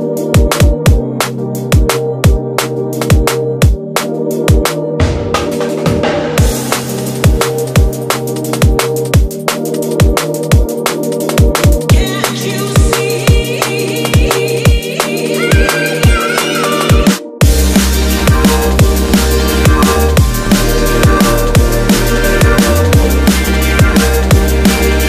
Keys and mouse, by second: 1.2 x, 4.2 shift+a, 10.6 KP_1, 11.7 s, 15.9 g, 20.4-21.8 ctrl+middle drag, 21.8 Tab, 22.8-24.3 ctrl+middle drag, 24.3 ctrl+r.